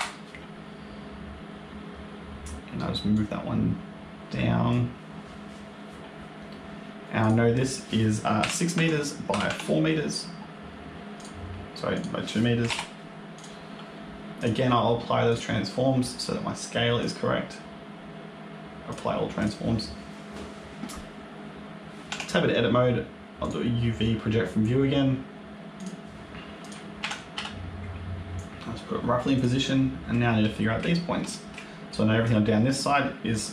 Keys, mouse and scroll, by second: 3.0 click, 7.1 click, 11.8 click, 13.2 click, 14.3 click, 15.2 click, 16.9 click, 19.3 click, 22.0 Tab, 23.3 click, 26.1 shift+middle click, 26.1 scroll up 2, 26.1 g, 26.9 a, 27.2 s, 30.4 shift+middle click, 30.8 scroll up 2, 31.2 shift+middle click, 31.8 click, 33.2 click.